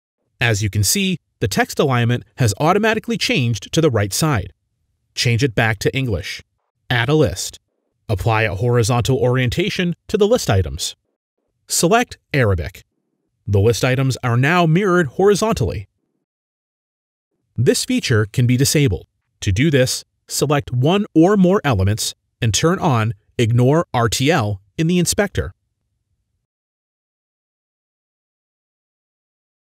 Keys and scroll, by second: 0.2-1.0 typing, 4.3-5.1 typing, 10.9-11.6 typing, 13.1-13.8 typing, 15.8-17.0 typing, 19.9 shift+F10.